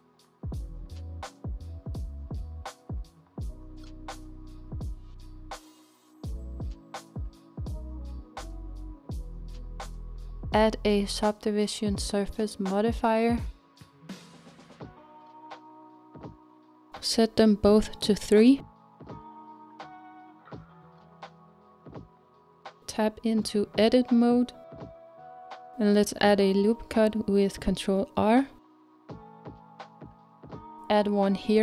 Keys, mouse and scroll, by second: 0.8 KP_7, 5.1 scroll down 1, 5.4-7.8 middle drag, 7.8-8.5 scroll up 1, 8.5-9.5 shift+middle drag, 9.5-11.4 scroll up 2, 14.0-22.4 drag, 22.4 middle click, 23.3 Tab, 24.0-26.6 scroll up 2, 26.6-27.7 scroll up 1, 27.7 ctrl+r, 29.7-31.6 middle drag.